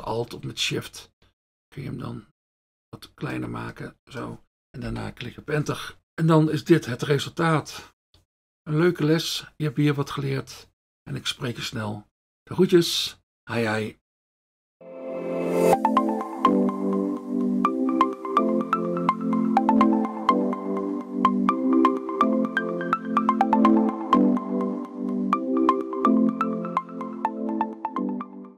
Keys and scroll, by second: 4.9 Return.